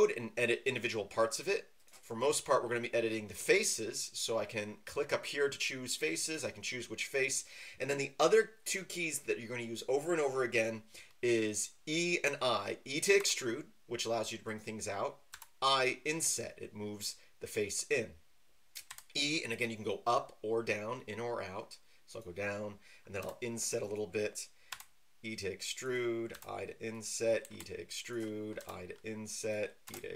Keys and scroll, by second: 13.2 e, 15.3 i, 18.9 e, 23.2 i, 24.7 e, 26.3 i, 28.5 typing, 29.8 e.